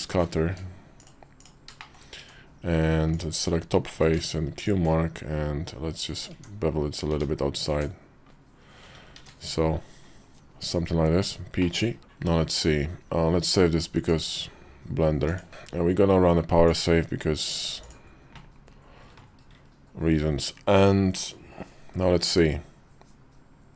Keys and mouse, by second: 0.3 q, 1.5 middle click, 1.7 shift+click, 2.0 Tab, 2.9 click, 3.7 q, 6.1 Tab, 6.9 Tab, 7.5 Tab, 8.9 shift+2, 11.4 middle click, 13.8-15.2 drag, 16.5-17.8 drag.